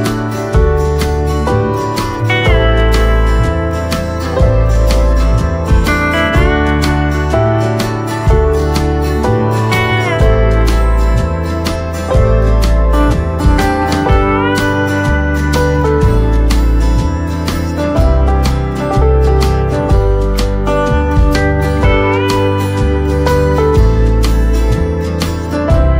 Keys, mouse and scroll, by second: 1.4 right click, 2.7 click, 4.6-5.4 scroll down 1, 5.5 right click, 8.4 scroll up 1, 10.4 click, 12.1 right click, 14.3 click, 14.8-17.3 right drag, 17.3 scroll up 1, 18.0 ctrl+z, 19.2 space, 20.7 click, 23.3 right click, 23.3 typing.